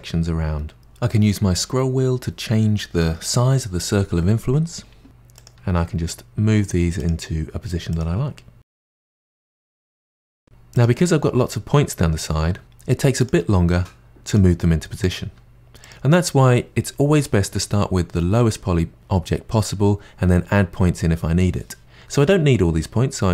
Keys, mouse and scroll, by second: 5.4 click, 5.6 g, 7.9 click, 8.0 g, 9.4 click, 9.5 g, 10.1 click, 10.3 g, 10.4 click, 13.2 click, 13.4 g, 15.0 click, 15.2 g.